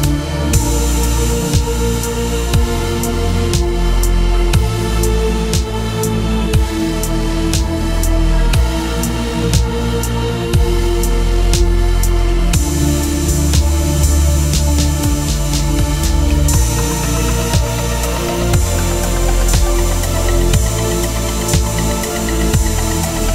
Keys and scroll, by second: 9.8 Return, 13.4 ctrl+t, 20.2 Return.